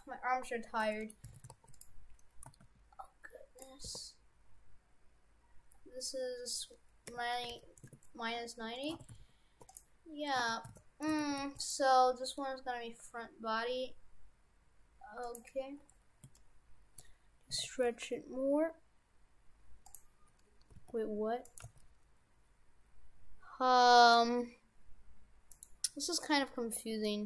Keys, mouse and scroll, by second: 1.1 middle click, 1.3 shift+f, 2.5 a, 2.7 g, 3.9 r, 8.8 middle click, 9.0 shift+f, 10.7 shift+f, 11.1 shift+f, 12.2 g, 15.6-16.3 scroll up 5, 16.4 shift+middle click, 17.5 s, 20.7 g, 21.6 g, 25.8-26.9 scroll down 2.